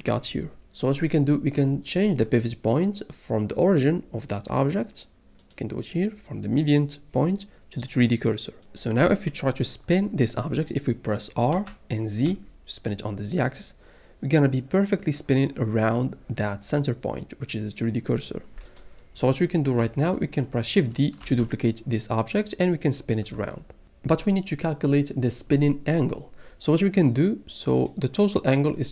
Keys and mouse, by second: 5.5-8.6 drag, 11.5 r, 12.2 z, 21.2 shift+d.